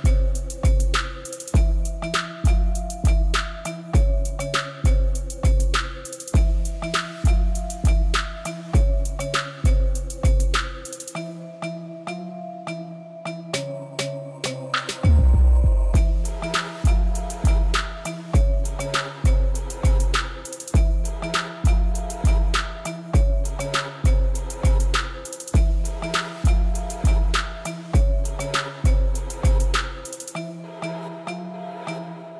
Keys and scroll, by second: 0.1 Return, 6.2-6.9 typing, 7.2 Return, 14.5 shift+a, 15.2 i, 15.3 m, 19.5 shift+a, 19.9 m, 20.0 i, 26.8 shift+d, 31.7 a, 32.1 u.